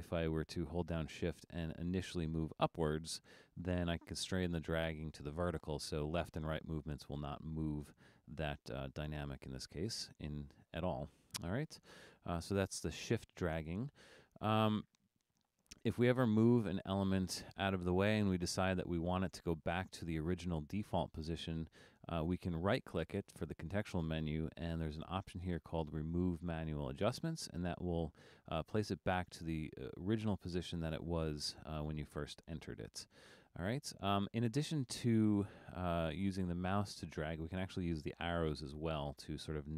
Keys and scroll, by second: 0.2 super+z, 38.4 Left, 38.6 Left, 39.2 Right, 39.5 Right.